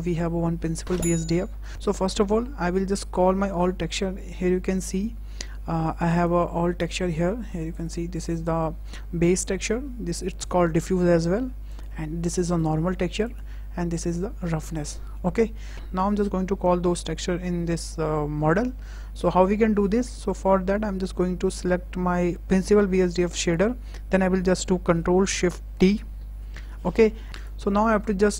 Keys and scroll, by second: 26.3 ctrl+shift+t.